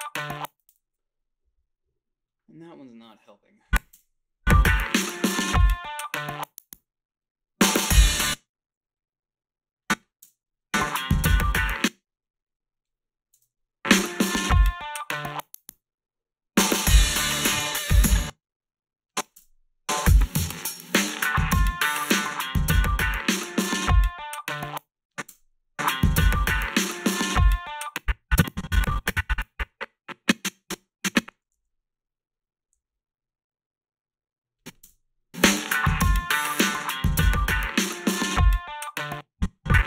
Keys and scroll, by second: 0.3 space, 3.9 space, 8.1 space, 10.2 space, 11.6 space, 13.3 space, 18.0 space, 19.4 space, 24.5 space, 25.3 space, 27.7 space, 31.6 s, 32.8 a, 34.8 space, 38.9 space.